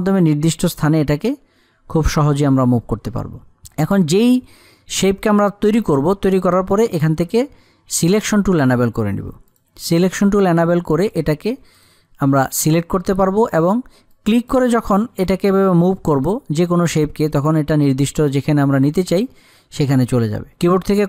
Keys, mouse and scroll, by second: 8.4 click, 14.6-20.1 drag.